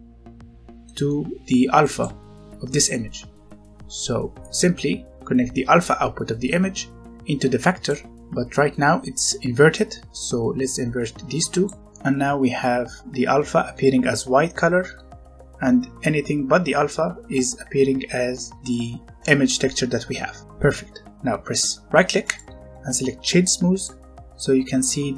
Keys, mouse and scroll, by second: 0.4-0.8 scroll down 1, 0.8 middle click, 1.3-1.8 scroll up 1, 1.8 click, 4.4 click, 8.1-10.0 scroll up 1, 10.2 click, 11.8 middle click, 17.3 scroll down 1, 20.3 scroll down 1, 20.4-22.1 scroll up 1, 22.2 right click, 23.7 click, 24.7 middle click.